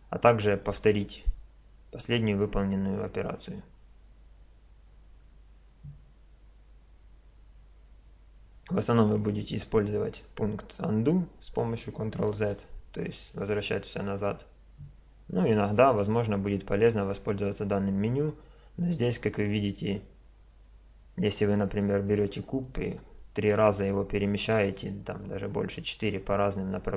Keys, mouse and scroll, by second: 2.8-7.5 middle drag, 12.4 ctrl+z, 13.2 ctrl+z, 16.0 click, 21.7-22.8 drag, 23.4 click.